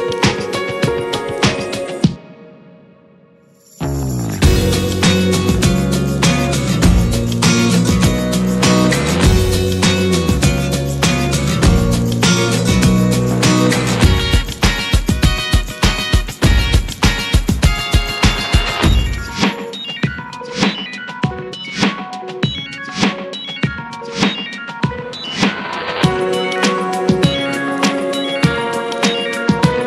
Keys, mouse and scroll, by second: 0.4 middle click, 0.8 scroll up 2, 1.0 middle drag, 1.3 middle click, 1.7-2.1 middle drag, 2.1 /, 2.4-3.0 middle drag, 3.0 drag, 3.4 shift+middle drag, 3.5 scroll up 4, 4.0-5.1 middle drag, 5.1-5.5 scroll down 3, 5.5-8.3 middle drag, 8.3 click, 8.4-9.0 scroll down 4, 9.0 middle click, 9.6-10.3 shift+middle drag, 10.3 click, 12.2 shift+middle click, 12.7-17.3 drag, 17.7-21.7 drag, 22.2 click, 22.9-23.7 scroll up 5, 23.7 shift+middle click, 24.4 s, 25.8-26.1 scroll down 4, 26.1 middle click, 26.3-27.3 scroll up 4, 26.7 shift+middle click, 27.0 middle drag, 27.5 s, 28.6 click, 28.8 scroll up 3, 29.1 Tab, 29.4 middle click.